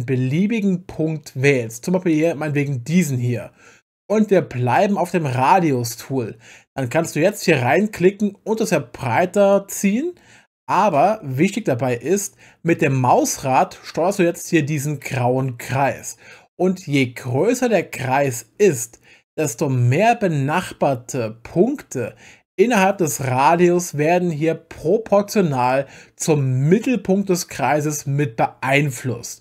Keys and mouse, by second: 2.1 click, 7.8 click, 8.6-29.4 drag.